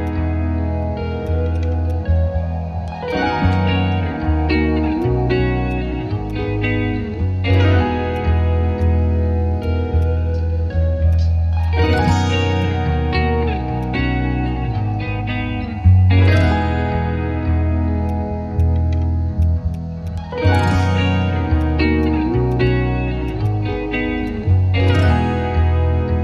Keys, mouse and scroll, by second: 0.0 ctrl+click, 1.2 ctrl+shift+click, 1.9 ctrl+shift+click, 2.6 ctrl+z, 3.3 ctrl+z, 3.5 ctrl+shift+click, 6.2 shift+click, 8.1 shift+click, 10.0 shift+click, 11.6 right click, 12.6 alt+click, 13.5 ctrl+z, 13.8 alt+click, 18.6 shift+click, 19.7 shift+click, 23.3 right click, 24.6 alt+click, 24.7 ctrl+z.